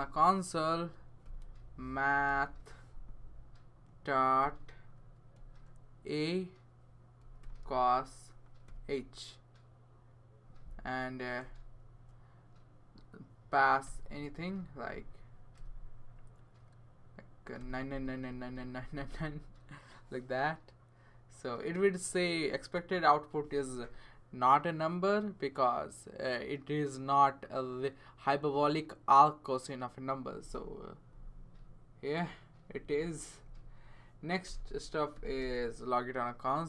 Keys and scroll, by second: 1.2-2.9 typing, 4.4 ., 5.3 a, 7.0-11.4 typing, 13.8 0, 14.9-16.0 typing, 17.3-18.7 typing, 20.8 typing, 34.5 Return, 35.1 typing.